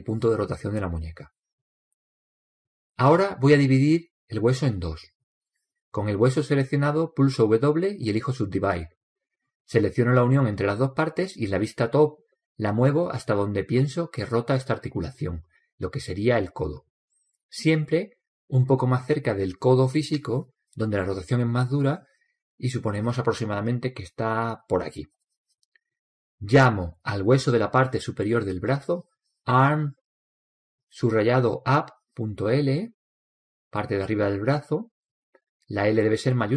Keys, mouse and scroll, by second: 0.7 click, 6.8-8.8 right drag, 8.2 w, 10.6-12.4 right drag, 11.9 click, 17.5 click, 21.0 click, 22.9 click, 28.4-30.3 right drag, 29.2 click.